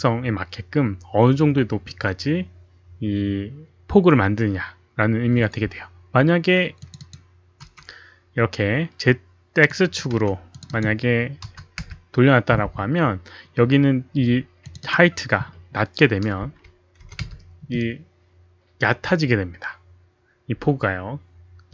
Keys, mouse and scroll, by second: 6.8 click, 6.9 click, 7.6 1, 9.6 click, 9.9 1, 10.5 click, 10.7 click, 11.4 KP_0, 11.7 Return, 14.6 Return, 14.6 click, 14.6 KP_0, 14.6 1, 16.3 KP_0, 16.8 Return, 16.8 click, 17.0 KP_1, 20.1 Return, 20.1 click, 20.1 KP_1, 20.1 KP_Decimal, 20.1 KP_0.